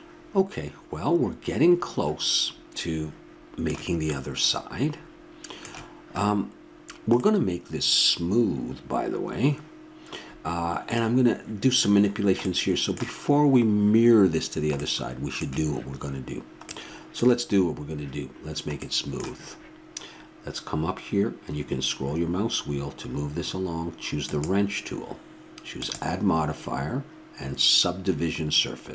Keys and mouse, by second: 8.0-24.2 middle drag, 24.2-27.6 drag.